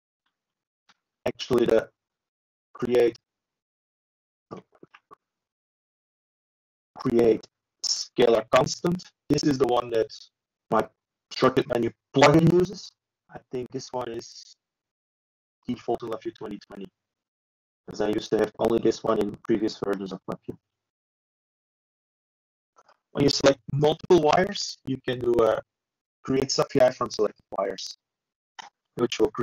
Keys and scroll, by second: 24.2 alt+F4.